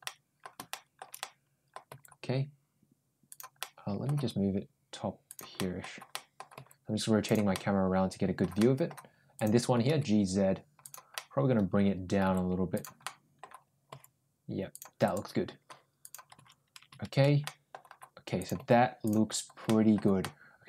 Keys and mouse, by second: 0.5 middle click, 1.0 middle click, 1.7 g, 3.4 middle click, 4.0 g, 5.4 middle click, 5.9 middle click, 6.4 g, 7.4 middle click, 8.4 middle click, 9.2 click, 9.6 g, 11.0-12.0 middle drag, 12.1 g, 12.9 middle click, 13.7 g, 14.9 click, 15.9 click, 17.3 middle click, 18.2 ctrl+click, 18.4 ctrl+g, 19.5 middle click, 20.0-20.6 middle drag.